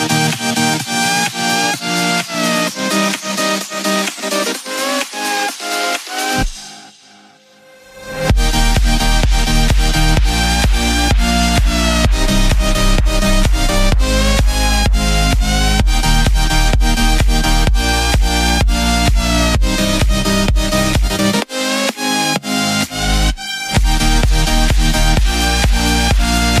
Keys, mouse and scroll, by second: 1.2 b, 1.8 shift+d, 5.5 x, 8.8 b, 9.5 shift+d, 12.8 s, 16.1 click, 16.2-16.6 scroll up 2, 16.6-20.1 shift+middle drag, 20.1-20.6 scroll down 3, 20.6-23.6 middle drag, 23.6 z, 24.5-26.6 middle drag.